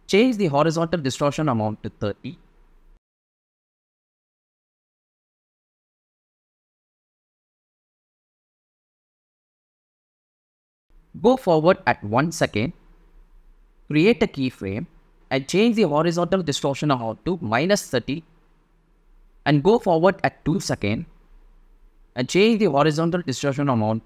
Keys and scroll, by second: 5.1 u, 15.3-16.5 typing, 22.2-23.1 typing.